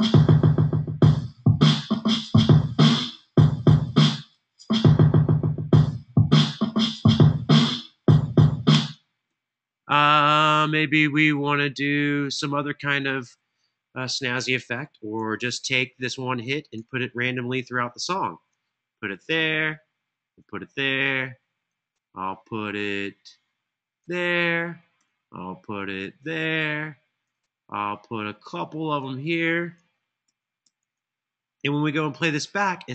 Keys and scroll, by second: 8.5 space, 15.1 super+e, 29.9 super+d, 30.3 super+d.